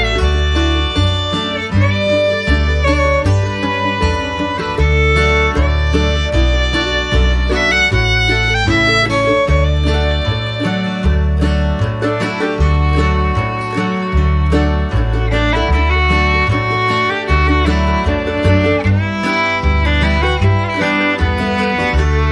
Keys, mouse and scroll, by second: 11.6 ctrl+z.